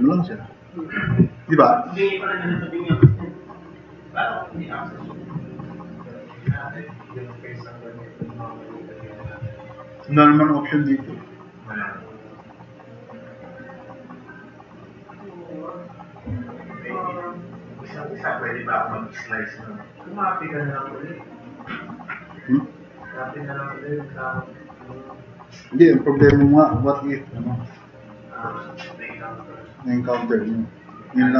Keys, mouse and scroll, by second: 16.4-17.2 drag, 17.9 click, 19.7 click, 26.3 1, 29.7-30.1 drag.